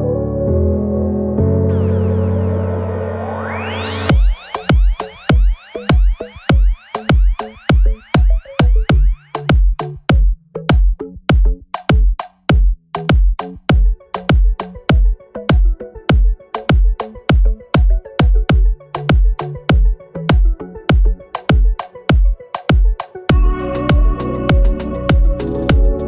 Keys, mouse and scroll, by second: 0.5 right click, 1.3 click, 3.2 click, 4.0 click, 4.5 click, 5.6 click, 5.8 double click, 6.4-7.9 typing, 9.0 click, 9.5 scroll up 1, 10.4 scroll down 1, 11.0-13.9 drag, 14.1-14.5 scroll up 2, 14.6 alt+middle click, 15.0 scroll up 2, 15.4 scroll down 2, 15.8 scroll up 2, 16.0 alt+middle click, 16.5-17.2 scroll down 4, 17.5 alt+middle click, 17.7 scroll down 2, 18.0-18.6 alt+middle drag, 18.6 click, 19.4-21.5 drag, 21.7-22.1 scroll up 3, 22.3 alt+middle click, 22.5-22.9 scroll up 3, 23.0 alt+middle click, 23.7-24.1 scroll down 3, 24.6 alt+middle click, 24.9 scroll down 2, 25.2 alt+middle click, 25.5 scroll down 2, 25.8 alt+middle click.